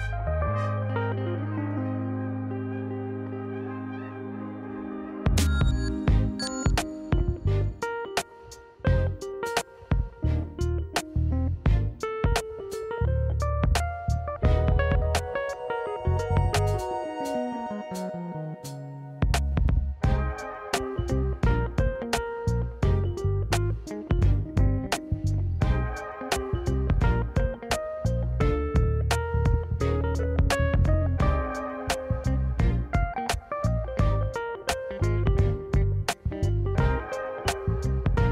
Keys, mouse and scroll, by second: 0.3 scroll down 1, 0.8-1.4 scroll up 1, 1.4-2.2 scroll up 2, 2.2 e, 5.0 middle click, 8.1 ctrl+z, 9.0 Tab, 10.0-10.3 middle drag, 10.8-11.2 scroll down 1, 11.2 scroll up 1, 12.0 KP_1, 12.6-12.9 scroll down 2, 13.1 shift+middle drag, 13.1 scroll up 1, 14.0 click, 15.1 shift+d, 16.4-18.0 drag, 18.9 shift+click, 19.6 click, 20.6 click, 20.9 middle click, 21.2-21.6 scroll up 1, 21.6 Tab, 21.6-21.9 scroll down 1, 21.9 middle click, 23.0 middle click, 24.2 shift+click, 24.8 middle click, 25.9 click, 26.6 middle click, 27.2 shift+click, 27.5 middle click, 28.4 shift+click, 28.6 middle click, 30.2-32.4 right drag, 32.4 middle click, 33.1 middle click, 33.6-34.0 scroll up 3, 33.8 middle click, 34.9 ctrl+z, 35.3 middle click, 35.8-36.2 scroll down 2, 36.6 Tab, 38.1 ctrl+s.